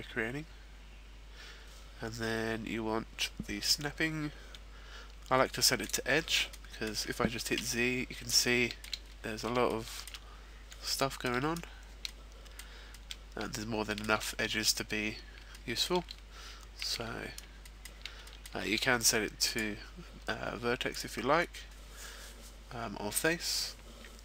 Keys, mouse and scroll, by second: 3.6 click, 6.5 middle click, 7.5 z, 8.3 shift+middle click, 9.0-10.3 scroll up 4, 10.3 shift+middle click, 11.0 shift+middle click, 12.0 shift+middle click, 14.2 shift+middle click, 14.2-14.8 scroll up 4, 14.8-15.5 scroll down 1, 15.5 shift+middle click, 15.5-16.6 scroll down 4, 16.7 shift+middle click, 17.1 z, 17.6 shift+middle click, 18.3 shift+middle click, 19.5 click, 20.9 click.